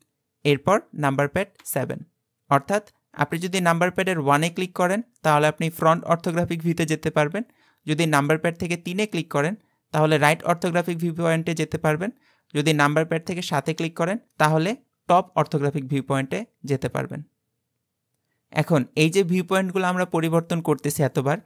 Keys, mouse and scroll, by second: 1.7 KP_7, 4.3 KP_1, 8.8 KP_3, 13.5 KP_7.